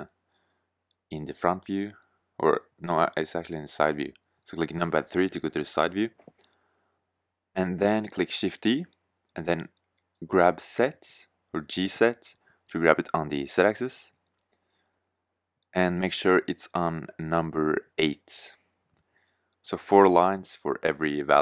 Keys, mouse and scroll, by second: 0.5 KP_1, 1.9 KP_3, 7.7 shift+d, 19.4 click, 21.3-21.4 middle drag.